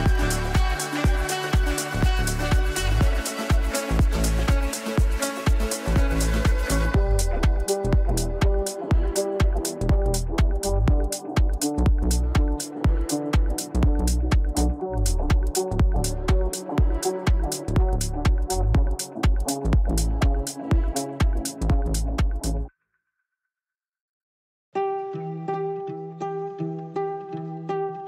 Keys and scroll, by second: 3.9 g, 17.8 g, 20.6 ctrl+z, 25.0 g.